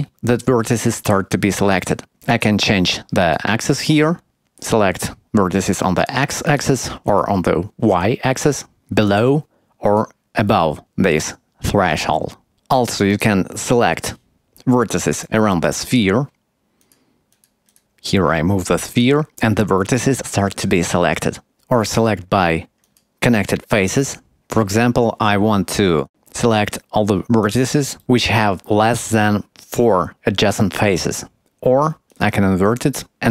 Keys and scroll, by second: 9.1 KP_1.